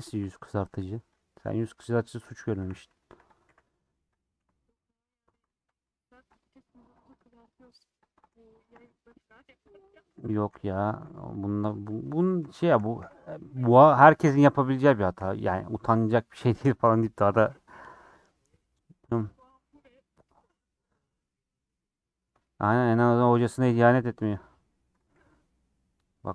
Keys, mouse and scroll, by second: 0.2 alt+z, 1.3 click, 1.8 middle click, 2.5 1, 3.0 2, 3.2 click, 3.4 f, 4.1 click, 4.3 f, 4.8 middle click, 5.4 ctrl+z, 5.6-7.1 middle drag, 7.3 click, 8.6 shift+click, 8.8 f, 9.0 middle click, 9.7 click, 10.1 1, 10.2 click, 10.5 x, 11.8 click, 12.9 f, 13.6 click, 14.9 click, 15.1 f, 15.3-23.3 middle drag, 23.3 3, 23.6 alt+z, 24.2 alt+z, 25.0 click, 25.1 g.